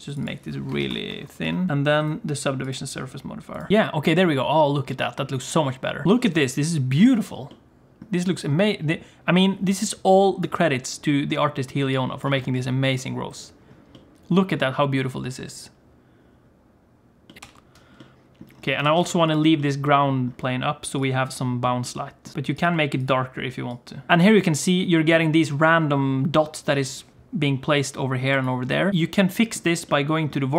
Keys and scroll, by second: 6.0 h, 17.4 alt+h, 18.8 alt+a, 19.1 ctrl+s.